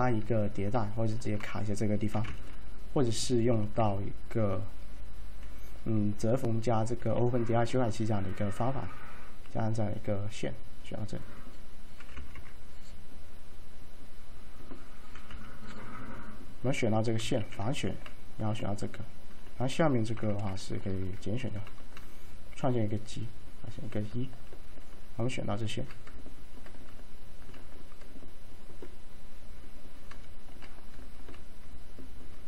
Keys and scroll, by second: 2.2 t, 7.1 z, 12.1 4, 12.2 5, 12.4 Tab, 15.2 typing, 17.5 a, 20.3 F3, 20.3 typing.